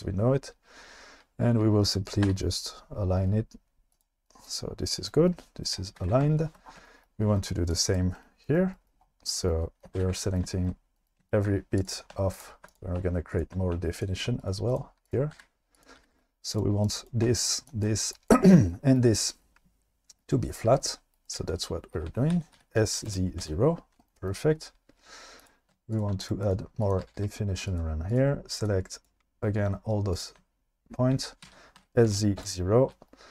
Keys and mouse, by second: 2.2 r, 3.9 click, 6.0 alt+z, 9.9 alt+z, 12.4 shift+click, 13.3 shift+click, 14.0 shift+click, 14.5 right click, 15.3 g, 16.0 g, 16.1 g, 16.5 click, 18.1 shift+click, 22.3 s, 22.6 z, 23.1 KP_0, 23.4 Return, 26.0 shift+click, 26.4 click, 26.9 click, 27.0 g, 27.2 g, 27.7 click, 31.4 s, 31.8 z, 32.1 KP_0, 32.4 Return.